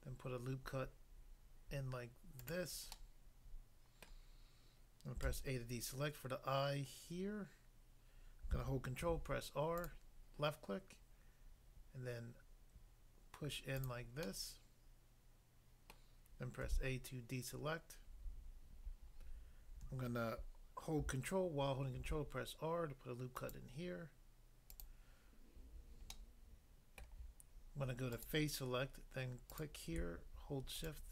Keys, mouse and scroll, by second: 2.4 click, 2.5 click, 2.9 middle click, 4.1 middle click, 5.2 a, 9.1 ctrl+r, 9.8 click, 13.8 click, 14.3 middle click, 15.9 middle click, 16.6 a, 22.0 ctrl+r, 23.3 click, 23.6 click, 24.7 click, 24.8 click, 26.1 middle click, 27.0 middle click, 28.1 click, 28.2 click, 29.5 click, 29.6 click, 30.8 shift+click, 31.0 shift+click.